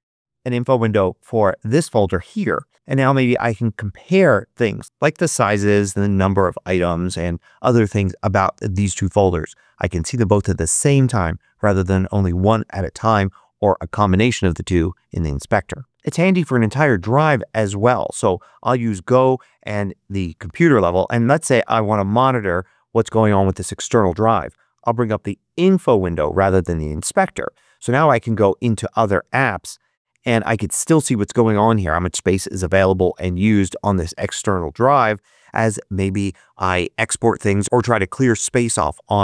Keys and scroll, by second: 0.0 super+i, 25.4 super+i.